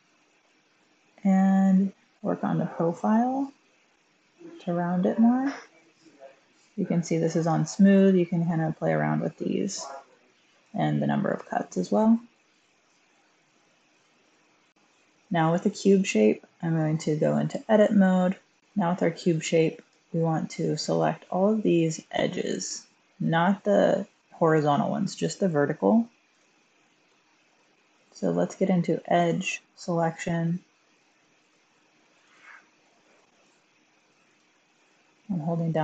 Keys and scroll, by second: 13.8 Tab, 14.7 typing, 17.2-18.0 typing.